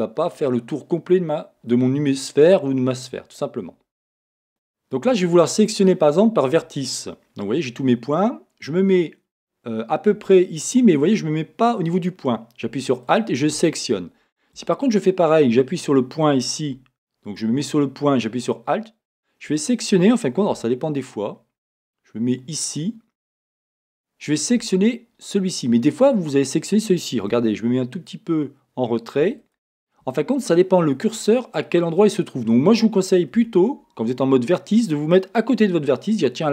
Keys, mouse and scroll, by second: 1.7-4.5 middle drag, 4.5 a, 13.1 alt+click, 14.6 a, 18.4 click, 20.6 a, 20.9 scroll up 1, 23.8 alt+click, 27.4 a, 29.4 alt+click, 33.4 a.